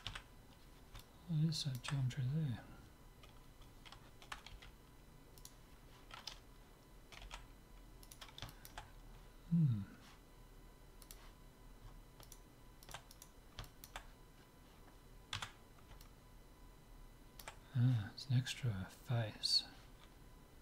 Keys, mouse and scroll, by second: 0.1 z, 1.0-4.2 middle drag, 4.5 g, 5.5-7.2 right drag, 7.4 g, 8.5-10.8 middle drag, 11.1-12.8 drag, 12.3-13.8 right drag, 13.7-14.9 drag, 13.8-15.1 middle drag, 15.5 Tab, 18.0-19.7 middle drag.